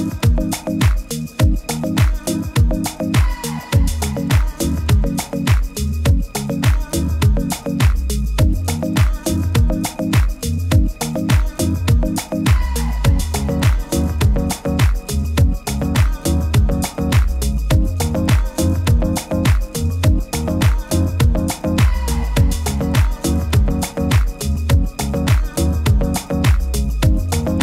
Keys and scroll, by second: 0.7 super+z, 2.8 super+z, 5.8 super+-, 5.9 super+-, 6.2 super+-, 8.6 super++, 13.6 super+-, 13.9 super+-, 14.7 super+-, 19.2 super+-.